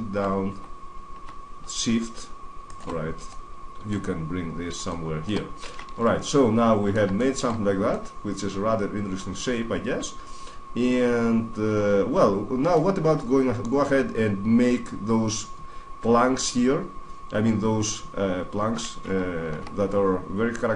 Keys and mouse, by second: 2.5 right click, 3.1 middle click, 4.1 middle click, 4.7 middle click, 4.9 middle click, 5.3 middle click, 5.7 Tab, 7.7-8.9 middle drag, 9.1-9.7 middle drag, 12.6-17.2 middle drag, 19.3 Tab.